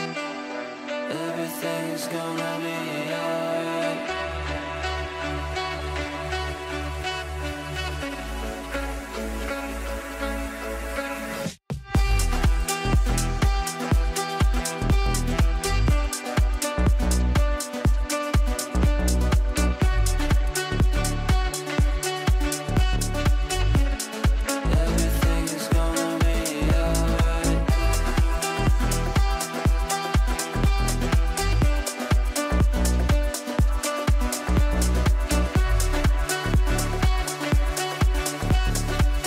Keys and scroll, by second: 1.7 ctrl+r.